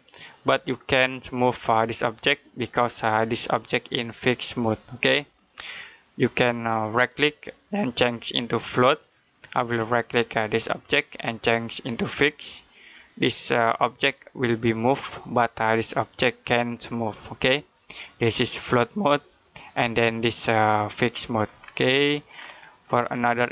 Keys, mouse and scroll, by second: 6.8 right click, 8.7 click, 10.3 right click, 12.1 click, 18.0 click, 21.4 scroll down 1, 21.7 scroll up 1, 22.8 click.